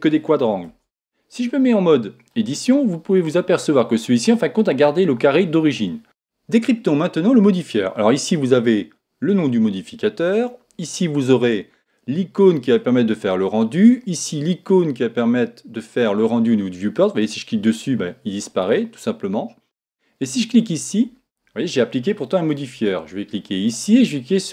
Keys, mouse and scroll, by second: 0.2-0.6 scroll up 1, 0.7 Tab, 1.4-5.1 middle drag, 17.2-20.2 drag, 20.5 click, 21.7-23.4 middle drag.